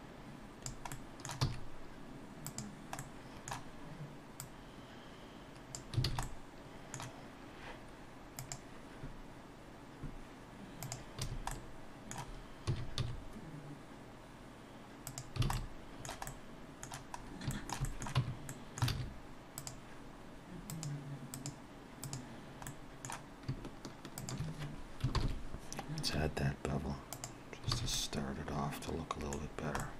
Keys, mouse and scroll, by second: 0.9 middle click, 1.5 e, 3.0 middle click, 4.4 click, 6.1 alt+a, 6.3 middle click, 11.2 a, 11.5 middle click, 12.7 s, 15.5 alt+a, 15.6 alt+middle click, 16.3 middle click, 17.1-17.5 scroll up 1, 17.5 shift+middle click, 17.9 middle click, 18.2 Tab, 18.5 middle click, 18.9 alt+a, 19.6 click, 20.9 click, 22.7 middle click, 24.2 shift+click, 25.1 ctrl+l, 27.8 alt+a, 28.0 middle click, 29.5-29.8 scroll down 1, 29.8 middle click.